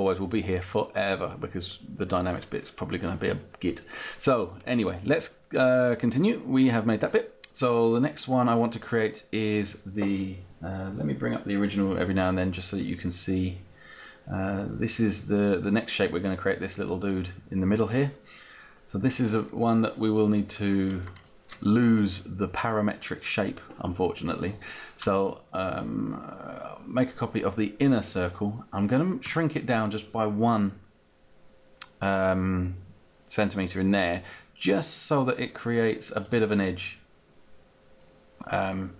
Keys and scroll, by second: 29.3 Down, 32.3 Down.